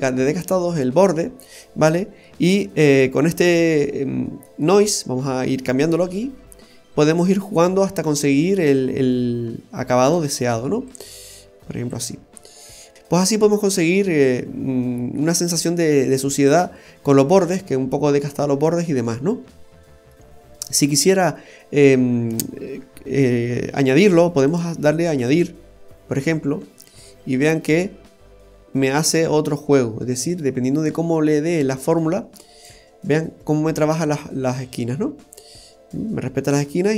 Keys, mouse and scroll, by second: 1.1 scroll up 1, 1.8 middle click, 1.8-2.2 scroll up 3, 4.0-4.3 scroll down 2, 4.3 middle click, 6.0 click, 10.8 click, 12.2-12.9 scroll down 2, 12.4 middle click, 12.9 click, 12.9 scroll up 1, 13.1-13.4 scroll down 1, 13.4 middle click, 13.4-13.8 scroll down 2, 15.3-16.6 scroll up 1, 17.8-18.2 scroll down 2, 18.2 middle click, 20.8 scroll down 1, 21.2 middle click, 24.4 click, 26.3-26.6 scroll up 2, 26.9 middle click, 26.9-27.8 scroll up 3, 30.3 click, 33.0 scroll down 1, 33.5 middle click, 33.5-33.8 scroll down 3, 36.1 middle click.